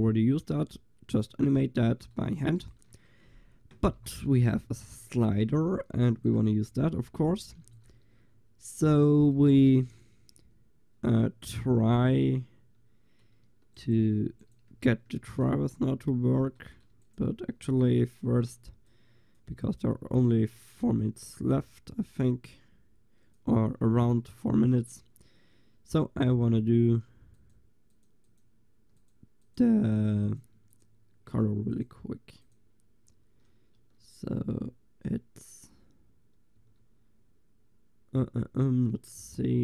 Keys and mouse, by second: 2.2 click, 2.7 ctrl+s, 6.0 click, 6.1 ctrl+s, 7.1 click, 7.7 ctrl+s, 9.4 a, 9.8 ctrl+s, 13.6 middle click, 14.5-15.0 middle drag, 14.8 a, 15.2 ctrl+s, 23.8 click, 27.4-36.6 drag, 33.8 Tab, 36.6 Tab.